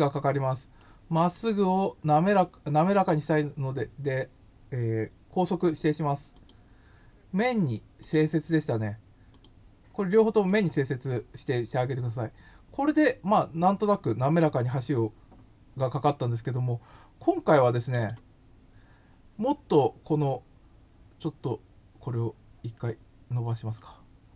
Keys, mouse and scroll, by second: 0.7 middle click, 2.9 click, 6.3 click, 8.0 click, 9.3 click, 10.4 click, 16.9 click, 18.0 click, 19.2 scroll up 1, 19.7 scroll up 1, 23.7 click.